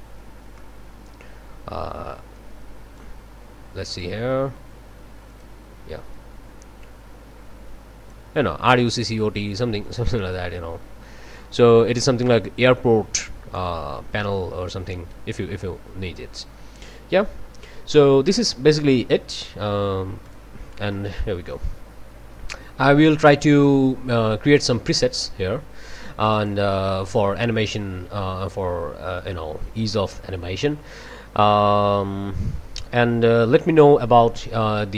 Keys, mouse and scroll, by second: 0.6-1.5 drag, 2.3-3.2 drag, 3.9 click, 4.2-5.3 scroll down 2, 5.3 click, 6.1-8.3 drag, 9.8-16.4 drag, 18.0-18.3 scroll down 2, 20.2 click, 21.5-22.3 scroll up 2, 23.5 click, 26.3 click, 28.0 scroll up 2, 33.0 scroll down 2.